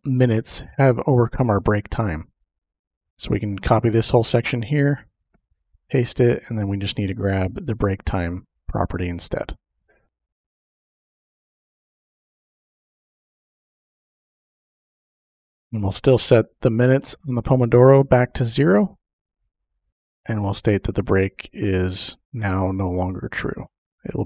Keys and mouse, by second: 1.6-3.3 drag, 3.6 ctrl+c, 5.1 ctrl+v, 5.8 click, 6.1 space, 7.4 click, 8.4 click, 9.9 ctrl+v, 9.9 typing, 10.8 click, 11.7 ctrl+c, 12.6 click, 13.9 ctrl+v, 14.0 typing, 14.5 click, 17.8-18.8 drag, 19.1 ctrl+c, 19.9 ctrl+v, 20.1 Return, 21.7-22.9 drag, 23.3 ctrl+c, 23.9 click.